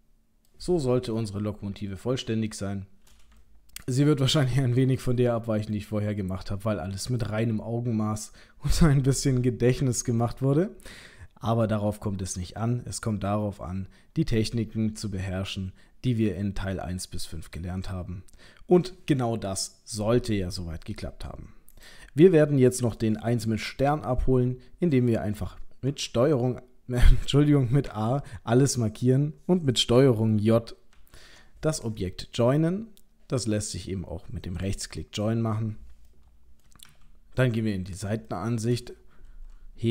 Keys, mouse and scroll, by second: 0.5 middle click, 0.7-1.1 scroll down 2, 1.2 middle click, 2.1 middle click, 2.5 shift+middle click, 3.0 middle click, 3.5 ctrl+middle click, 3.9 ctrl+middle click, 5.1 middle click, 10.0 middle click, 21.7 click, 22.4 middle click, 26.0 ctrl+a, 27.9 a, 30.9 ctrl+j, 34.7 right click, 36.1 middle click, 36.8 KP_3, 38.3 shift+middle click, 39.2-39.9 scroll up 1.